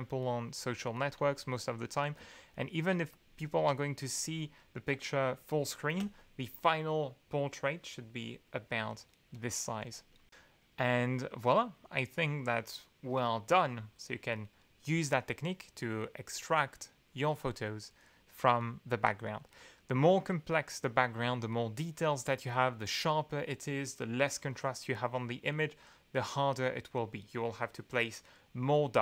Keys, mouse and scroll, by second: 0.8 2, 2.2 ctrl+space, 2.2 ctrl+scroll up 2, 2.3-3.0 ctrl+drag, 3.1 ctrl+scroll up 2, 3.1-4.7 ctrl+drag, 5.3 ctrl+click, 9.3 click, 9.8 2.